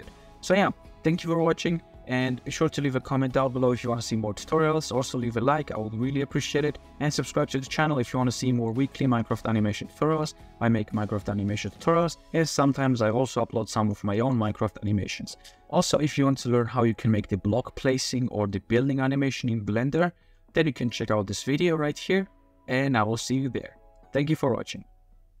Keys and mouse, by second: 6.2-7.6 middle drag, 8.1-8.7 middle drag, 14.1 middle click, 14.9 middle click, 15.9-17.9 middle drag, 19.7 click, 24.8 middle click, 24.8 click, 25.0-25.4 middle drag.